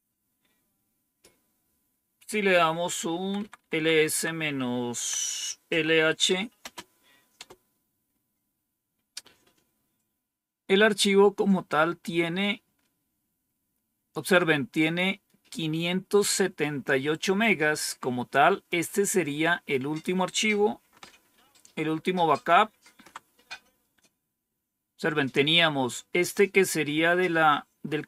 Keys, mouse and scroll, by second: 2.4 Up, 3.1 Left, 3.3 Left, 3.5 Left, 3.7 Left, 3.9 Left, 4.9-6.7 typing, 7.3 Return, 14.3-16.2 drag, 18.6-19.9 drag, 21.2 ctrl+-.